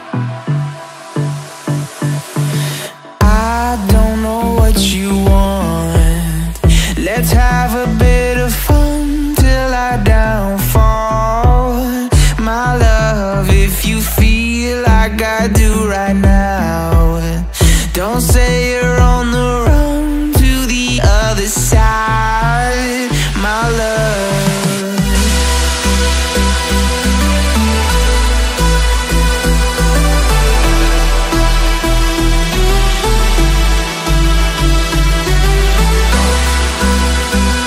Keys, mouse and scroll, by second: 6.8 ctrl+z, 11.1 shift+click, 12.3 shift+click, 17.1 Up, 17.2 Up, 18.1-18.4 Down, 19.0 Down, 19.1 Up, 19.9 double click, 22.4-22.7 Right, 25.5 double click, 26.4 Up, 26.5 Up, 29.5 alt+scroll down 1, 31.3 double click, 34.5-37.6 typing.